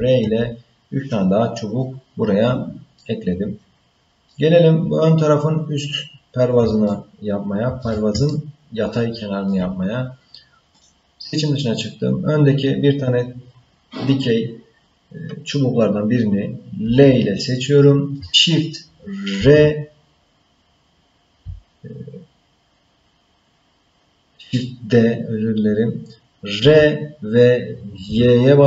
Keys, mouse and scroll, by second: 3.0-4.3 middle drag, 5.4-6.0 scroll down 1, 6.9-7.9 shift+middle drag, 8.3-9.5 ctrl+middle drag, 10.8 click, 16.8 l, 19.3 shift+d.